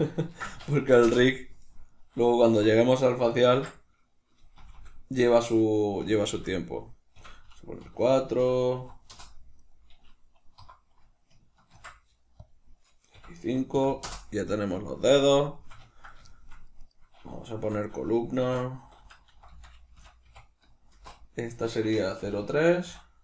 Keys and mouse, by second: 1.5 right click, 2.4 F2, 4.7 Left, 9.1 Return, 9.5 right click, 10.5 F2, 14.5-15.7 middle drag, 15.9 ctrl+middle click, 16.7 right click, 17.5 F2.